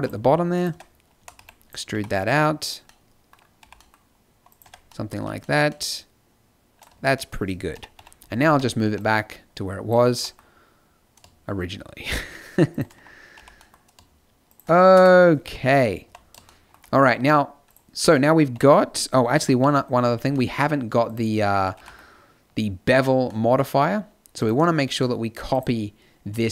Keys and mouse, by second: 0.7 Tab, 1.1 a, 1.3 b, 1.9 g, 2.5 click, 3.5 g, 4.6 Tab, 5.1 z, 6.9-8.8 typing, 10.1 g, 13.3 g, 14.9 KP_0, 15.4 z, 16.0 a, 18.5 KP_5, 19.4 KP_Decimal, 19.6 KP_5, 21.7 g, 26.4 z.